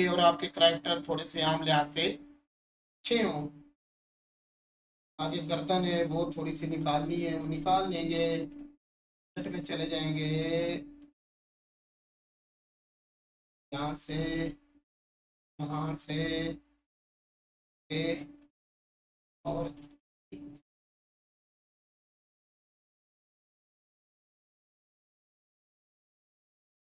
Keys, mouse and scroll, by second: 4.0-6.0 alt+shift+drag, 7.4 Tab, 8.5-11.0 alt+drag, 15.9 shift+click, 18.4-21.6 alt+drag, 22.3 click, 22.7-24.7 scroll down 1, 25.9 click.